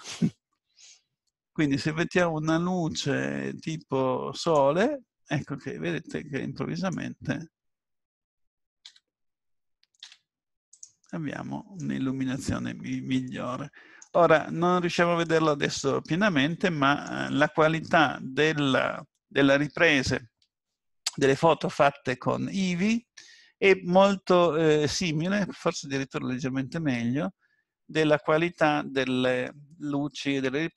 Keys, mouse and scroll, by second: 6.0 click, 8.8 g, 11.0 middle click, 13.0 scroll up 2, 13.2 shift+middle click, 14.3 scroll up 2, 15.3 middle click, 17.3-18.2 scroll down 3, 24.4-24.8 scroll up 2, 25.1-25.8 scroll up 2, 25.8-26.5 scroll down 2, 26.5 middle click.